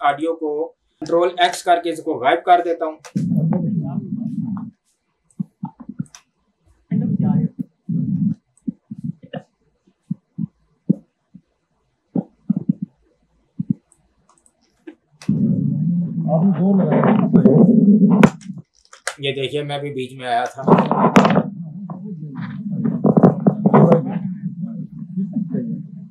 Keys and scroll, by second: 1.4 ctrl+x, 3.0 space, 4.6 space, 6.2 space, 8.2 space, 14.7 ctrl+`, 15.1 space, 18.4 space, 19.0 ctrl+`, 20.6 space.